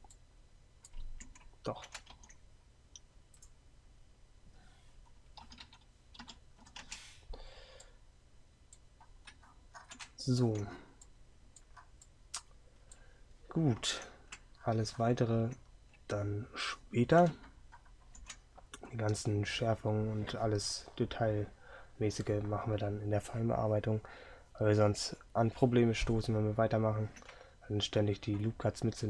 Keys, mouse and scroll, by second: 2.2 ctrl+r, 7.0 Tab, 9.9 right click.